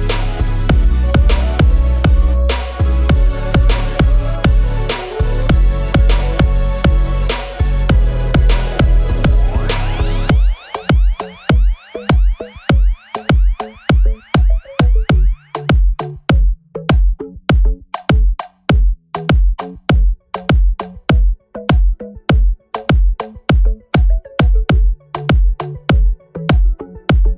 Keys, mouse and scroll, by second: 0.2 alt+middle click, 0.8 click, 1.6 scroll down 2, 2.0 alt+click, 2.5 scroll up 2, 2.8 alt+click, 3.4 scroll down 2, 4.5 click, 4.8 scroll down 1, 5.5 scroll down 1, 6.5 scroll down 1, 7.6 click, 8.0-9.0 typing, 9.3 Return, 10.4 scroll down 1, 10.6 alt+click, 11.1 scroll up 2, 11.3 alt+click, 12.2 alt+click, 12.8-13.8 typing, 14.7 scroll down 1, 15.0 alt+click, 15.7 scroll up 1, 15.9 alt+click, 16.4-16.8 scroll up 2, 16.9 alt+click, 18.1 shift+right click, 19.0-20.1 scroll up 6, 19.3 alt+middle click, 20.3-20.9 scroll down 4, 21.1-22.5 alt+drag, 22.7-23.1 scroll down 3, 23.1 alt+click, 23.8-24.9 scroll up 6, 24.5 alt+middle click.